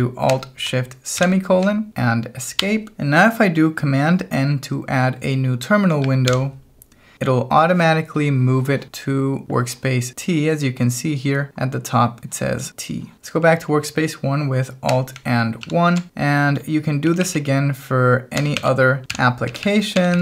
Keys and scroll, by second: 1.2 alt+shift+;, 2.6 Escape, 6.3 super+n, 15.6 alt+1, 17.1 k, 18.1-20.2 typing.